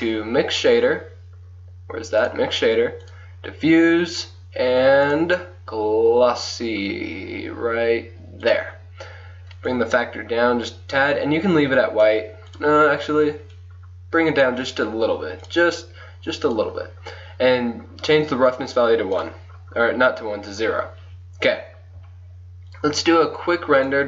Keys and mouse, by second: 1.2 click, 1.5-3.1 middle drag, 3.1-4.9 drag, 4.9 middle click, 5.1-7.5 drag, 7.5-9.8 middle drag, 9.8-11.8 drag, 12.6-15.1 drag, 15.6-20.4 drag, 20.7 click.